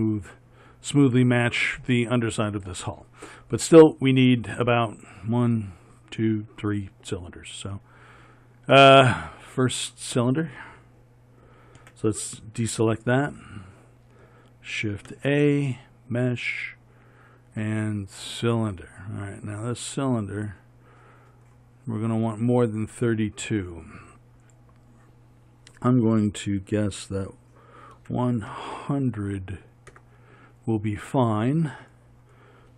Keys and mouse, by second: 8.4 middle click, 12.0 a, 15.3 shift+a, 20.3-28.9 middle drag, 28.9 KP_0.